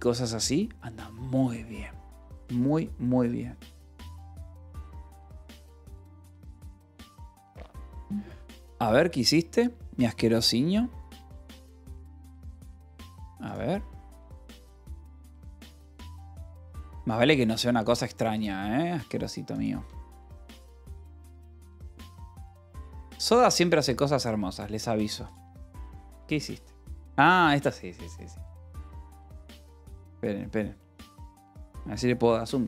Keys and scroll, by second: 25.6 Return, 31.9 shift+=.